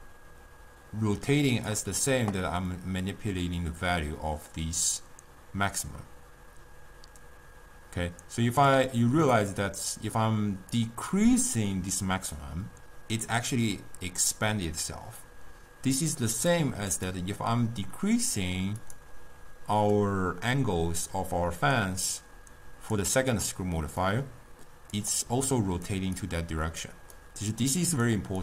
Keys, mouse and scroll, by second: 1.6 click, 2.8-5.8 drag, 9.6-13.9 drag, 16.1 click, 16.4 click, 17.0 click, 18.9 click, 20.0-23.1 drag, 24.1-25.4 drag, 25.4 d, 25.6 click, 25.9-26.2 d, 26.3 click, 26.9-27.2 d, 27.3-28.3 right drag, 28.3-28.4 typing.